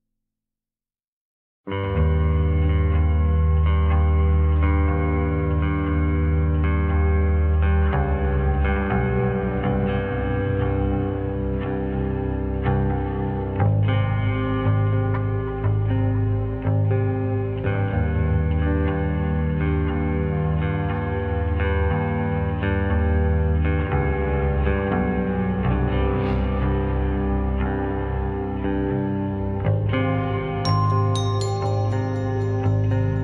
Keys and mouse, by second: 1.6 ctrl+z, 2.6 click, 3.1 click, 4.3 click, 6.9 click, 9.3-9.7 drag, 10.3-10.7 drag, 11.6 shift+drag, 12.7 middle click, 13.7 shift+click, 13.8 shift+middle click, 14.6-14.9 shift+middle drag, 15.2 middle click, 16.2 /, 16.8 Tab, 21.2 click, 25.9 shift+click, 26.3-28.3 middle drag, 28.9 shift+middle drag, 29.7 shift+click, 30.1 shift+click, 30.5 click, 31.7 shift+drag.